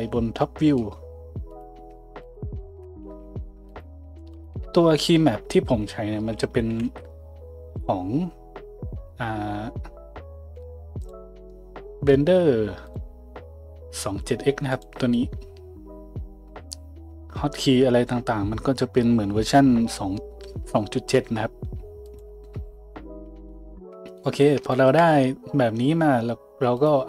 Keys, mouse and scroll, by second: 1.5 click, 1.6 middle click, 2.2 shift+click, 2.3-3.7 shift+middle drag, 3.0 a, 3.7 click, 3.8 ctrl+middle click, 4.3 ctrl+click, 4.4-26.8 ctrl+middle drag, 5.0 a, 6.8 ctrl+alt+u, 26.8 click.